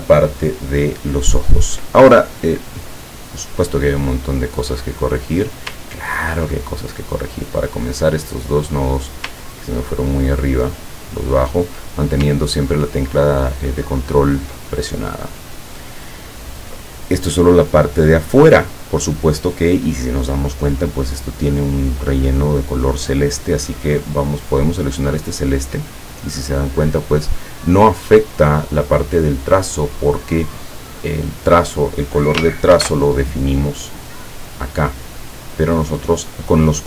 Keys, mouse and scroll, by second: 4.1 click, 5.4 click, 5.9-6.2 ctrl+scroll up 2, 6.4 ctrl+scroll up 2, 7.6-8.9 drag, 9.4-11.6 ctrl+drag, 13.0 ctrl+scroll down 1, 13.6-14.2 ctrl+scroll down 4, 14.8 ctrl+middle click, 25.4 click, 32.8 ctrl+shift+f, 34.3 click, 35.9 click.